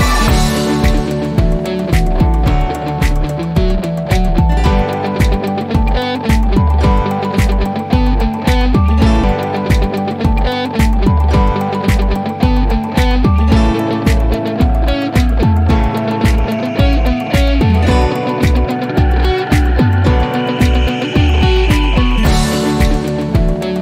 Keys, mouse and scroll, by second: 0.2-3.5 drag, 5.7 typing, 6.5 Return, 8.2-9.7 drag, 12.0 typing, 13.2 Return, 15.0-16.9 drag.